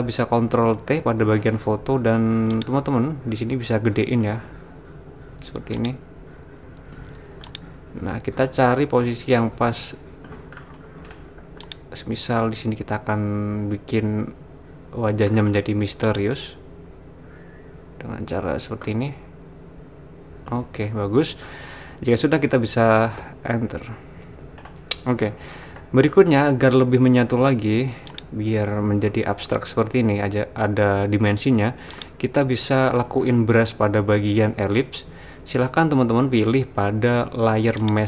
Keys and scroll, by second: 1.0 super+t, 23.3 Return.